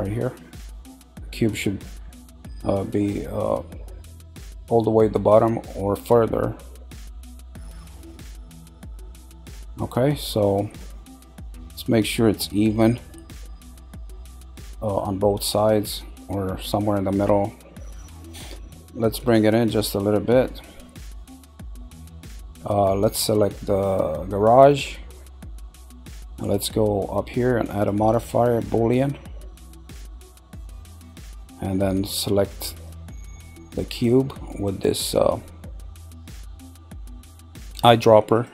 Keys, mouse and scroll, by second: 5.3-9.2 drag, 5.3-9.9 middle drag, 5.3-9.2 right drag, 10.4-12.8 middle drag, 14.2 click, 18.2 middle click, 19.2 click, 21.8-23.0 middle drag, 23.0 click, 27.7-30.8 drag, 32.7 click.